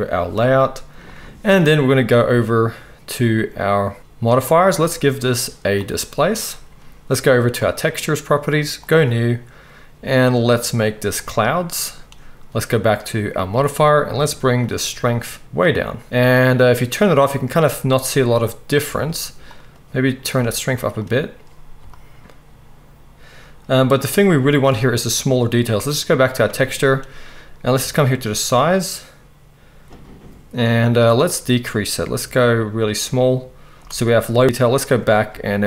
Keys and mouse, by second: 0.0-4.9 right drag, 4.9-7.8 middle drag, 7.8-8.9 right drag, 8.9-13.4 middle drag, 13.4-14.7 right drag, 14.7-17.2 shift+middle drag, 17.2 right click, 17.9 middle click, 18.2 right click, 18.7 middle click, 18.8 right click, 19.4-21.1 middle drag, 21.1 right click, 21.8-26.4 shift+middle drag, 26.4-35.6 drag, 28.0-35.0 shift+middle drag, 28.0-35.0 shift+right drag.